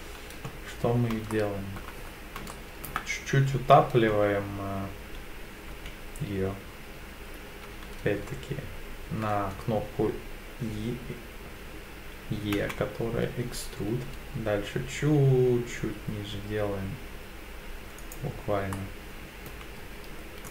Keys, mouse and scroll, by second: 1.3 shift+middle click, 2.1-2.5 scroll up 3, 2.5 shift+middle click, 5.7 e, 12.6 z, 18.0 click, 18.7 middle click, 19.8 z.